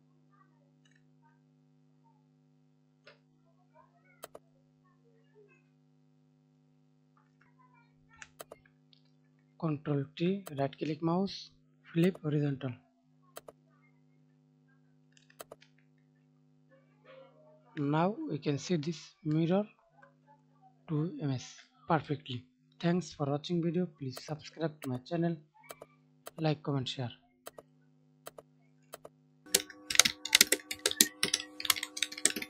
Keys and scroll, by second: 9.6 ctrl+t.